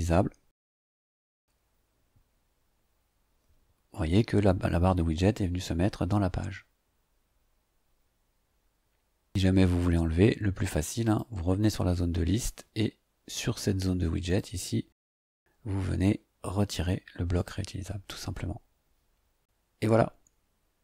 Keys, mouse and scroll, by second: 3.7-4.0 scroll down 2, 4.4 scroll down 2, 4.9 scroll down 1, 5.5-6.2 scroll down 3, 6.7-7.0 scroll down 2, 11.0 click, 14.2 click, 17.3 click.